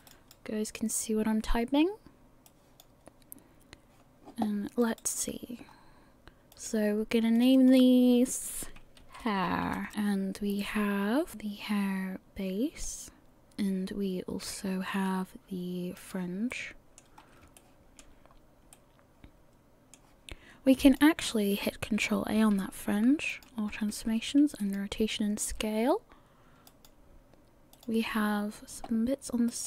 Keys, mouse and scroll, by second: 0.0 click, 0.1 right click, 2.5 click, 4.8 right click, 5.0 right click, 5.7-6.5 scroll up 1, 6.5 click, 6.5-7.4 scroll up 1, 7.4 click, 7.5 click, 10.5-11.3 scroll down 4, 11.3 click, 11.3 middle click, 11.3 scroll up 1, 13.4 click, 16.0 click, 16.5 middle click, 17.2 scroll up 4, 17.6 shift+middle click, 18.4 scroll down 1, 18.7 middle click, 20.8 click, 22.6 ctrl+a, 23.9 ctrl+a, 26.7 click, 27.7 click, 28.3-29.5 scroll up 1, 29.5 right click.